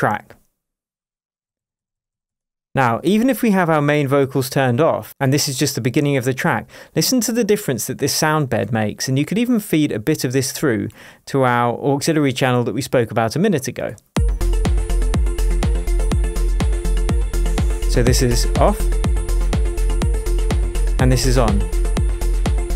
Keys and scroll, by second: 0.6 super+d, 3.0 super+BackSpace, 14.1 space.